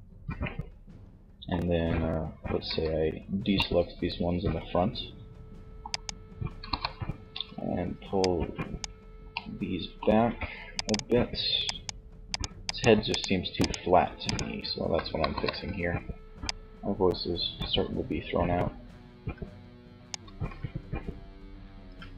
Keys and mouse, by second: 1.6 c, 5.0 right click, 5.6 KP_3, 8.5 click, 9.2-14.3 shift+middle drag, 14.3 click, 14.3 KP_3, 21.2 Tab.